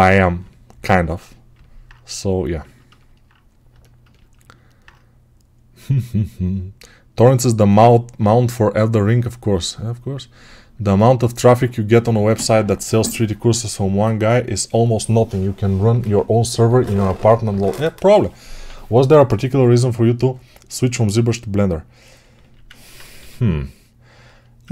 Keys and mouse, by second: 3.7-24.5 ctrl+alt+drag, 22.2 alt+q, 23.0 g.